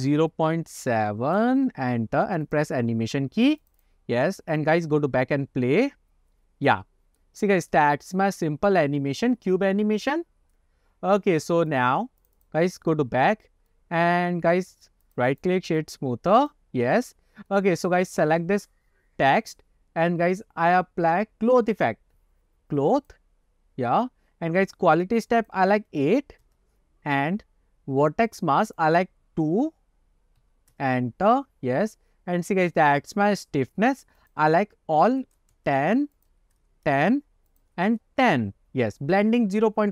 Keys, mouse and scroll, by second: 2.5 click, 3.6 click, 3.7 click, 3.9 click, 4.6 click, 11.8 click, 12.3 click, 12.5 click, 13.8-15.0 middle drag, 15.1 click, 15.4 click, 15.4 right click, 16.6 click, 16.9-17.3 scroll up 1, 17.6 middle click, 18.2 click, 21.8 click, 23.1 click, 25.5-26.9 drag, 28.8-31.2 drag, 31.7-32.3 scroll down 3, 34.3-36.0 drag, 36.3 click, 37.6-38.7 drag.